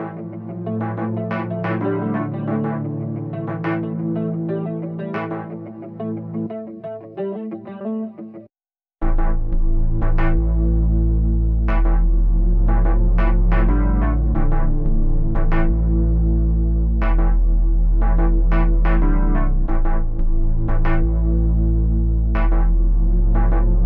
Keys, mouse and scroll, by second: 15.3 middle click, 15.8 scroll down 1, 16.1 middle click, 17.0 KP_3, 18.0-19.4 middle drag, 19.4 KP_1, 19.9 scroll up 1, 20.2-21.5 drag, 23.5-23.8 middle drag.